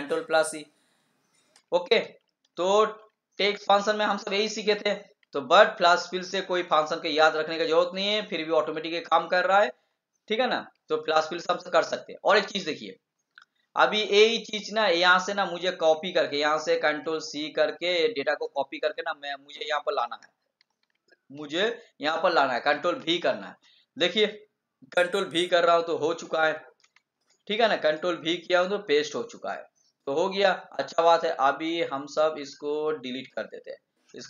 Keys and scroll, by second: 18.3 ctrl+c, 23.0 ctrl+v.